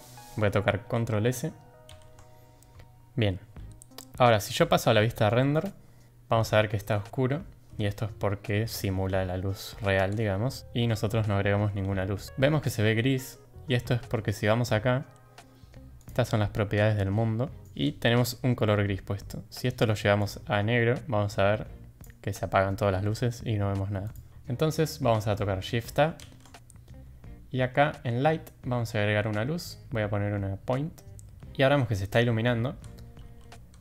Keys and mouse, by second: 5.5 click, 12.2 click, 16.0 click, 24.0 click.